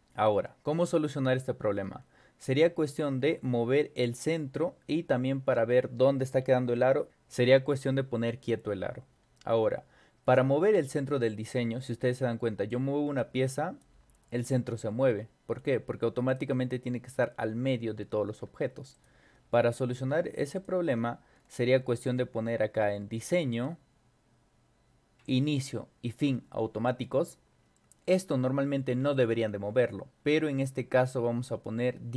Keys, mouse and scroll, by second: 1.8 scroll up 2, 3.1-3.4 scroll up 2, 4.1-4.5 scroll down 2, 4.9 scroll down 2, 10.9 scroll up 2, 11.4 scroll down 2, 11.8 scroll up 2, 12.7-13.8 drag, 16.3 click, 18.4 ctrl+y, 18.9 click, 20.6 click, 21.3-22.3 scroll up 6, 21.8 middle click, 22.0 middle click, 23.5 click, 26.9 click.